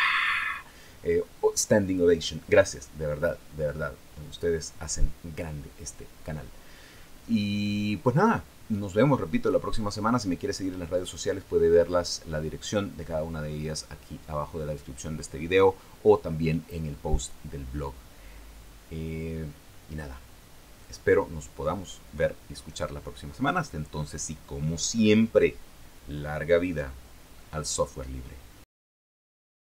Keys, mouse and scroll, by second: 28.6 click.